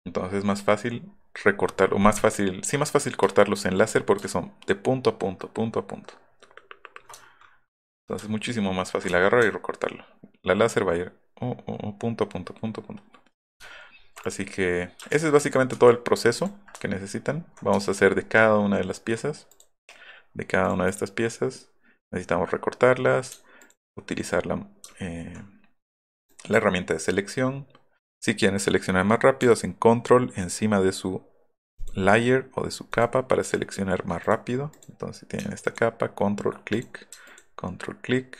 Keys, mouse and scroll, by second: 1.1 alt+middle click, 2.2 alt+middle click, 3.4 ctrl+click, 7.6 alt+middle click, 7.6-8.0 alt+scroll up 2, 7.9 alt+middle click, 9.1 alt+middle click, 9.3 alt+middle click, 13.6 alt+middle click, 13.9 alt+middle click, 14.2 click, 15.1 ctrl+z, 15.5 ctrl+z, 15.8 ctrl+z, 16.4 ctrl+click, 16.8 alt+middle click, 16.8-17.3 alt+scroll, 17.0 alt+middle click, 17.2 alt+middle click, 19.5 click, 20.6 click, 20.9 click, 23.6 ctrl+click, 24.9 scroll up 1, 26.3 click, 31.7 ctrl+click, 34.7 click, 35.6 ctrl+click, 36.1 ctrl+/, 36.8 click, 37.3 ctrl+click.